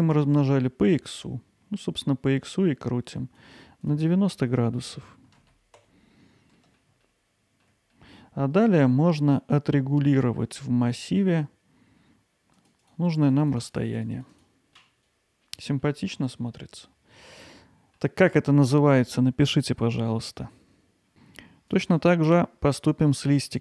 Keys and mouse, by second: 6.6-6.9 middle drag, 7.0-7.7 alt+middle drag, 8.0-15.0 middle drag, 15.8-17.2 alt+middle drag, 17.5-18.0 middle drag, 20.0-21.1 middle drag, 22.0 click, 23.0 click, 23.5 click.